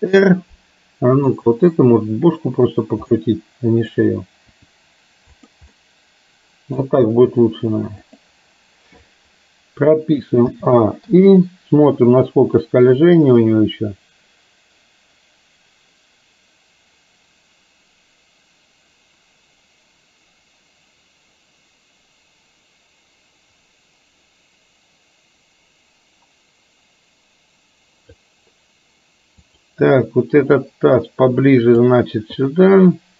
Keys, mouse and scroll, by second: 3.3-4.0 middle drag, 4.6 r, 5.8-6.9 middle drag, 7.1 r, 10.5 a, 11.1 i, 12.8-28.3 drag, 30.6-31.9 drag, 32.6 click.